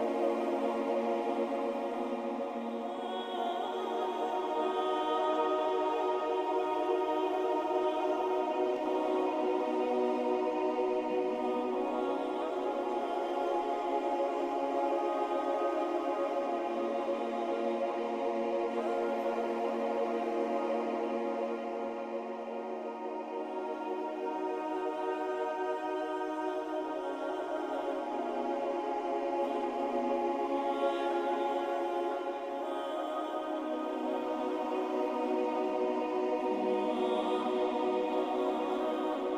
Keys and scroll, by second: 21.9 Down, 23.5 Down, 23.6 Down, 26.2 Up, 26.4 Up, 26.6 Up, 26.7-27.7 Up, 27.8 Up, 27.9 Up, 36.2 ctrl+alt+y.